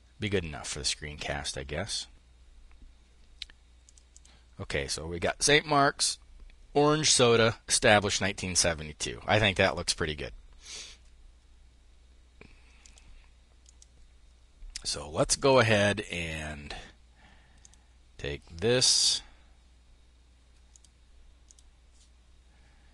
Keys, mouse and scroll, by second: 0.9 click, 3.2-5.2 drag, 12.3 click, 14.7 click, 17.0 click, 20.1 click, 20.9 click.